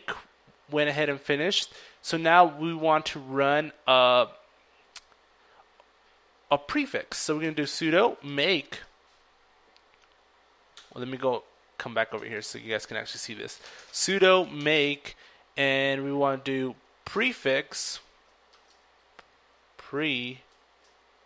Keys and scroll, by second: 9.6-11.1 typing, 14.4-17.3 typing, 18.5-20.9 typing.